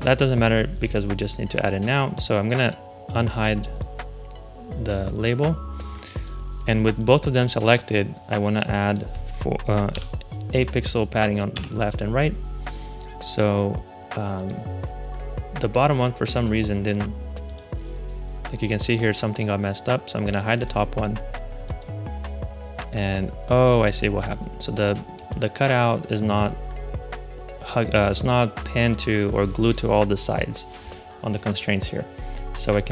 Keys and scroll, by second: 9.8 8, 11.4 Return.